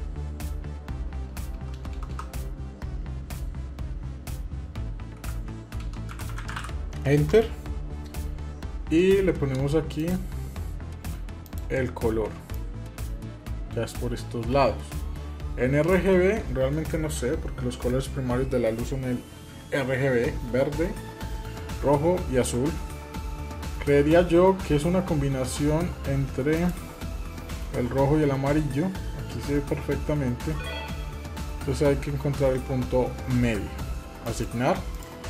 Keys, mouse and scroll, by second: 1.5 BackSpace, 9.8 click, 11.2 click, 26.3 click, 34.0 click, 34.7 click.